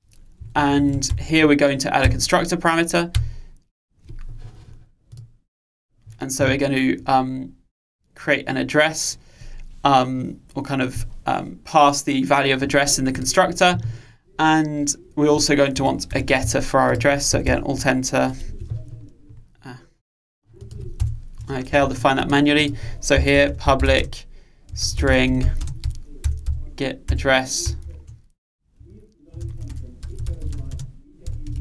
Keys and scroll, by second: 1.1 alt+Return, 2.1 alt+Return, 17.5 alt+Return, 27.1 Return.